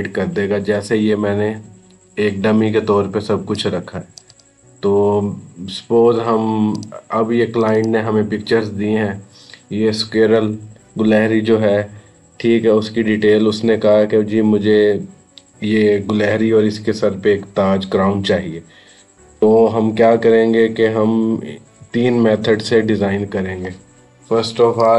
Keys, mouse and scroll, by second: 3.4 click, 6.6 click, 12.1 Right, 20.5 Right, 24.6 click.